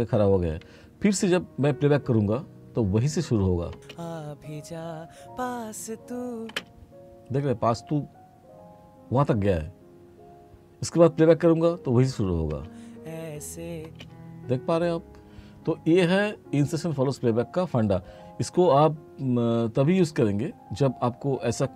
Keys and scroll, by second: 3.7 space, 6.5 space, 12.5 space, 13.9 space.